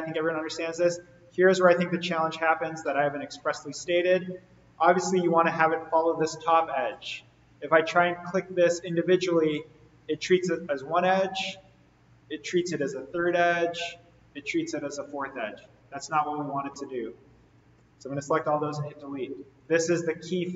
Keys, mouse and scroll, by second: 0.8 scroll down 1, 1.6 click, 2.5-4.6 scroll down 1, 8.2 click, 11.5 click, 14.1 click, 17.8 right click, 18.9 click.